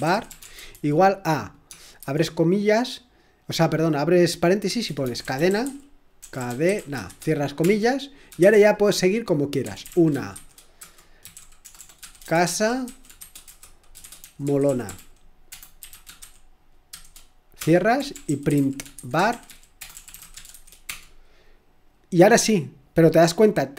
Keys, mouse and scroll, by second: 0.0-2.5 typing, 4.4-21.3 typing, 22.5 typing.